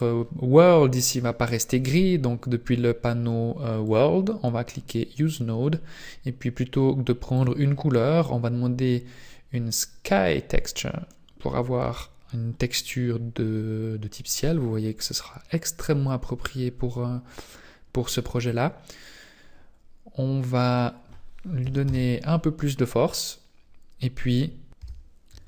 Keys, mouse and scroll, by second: 3.8 click, 7.4 click, 20.7 click.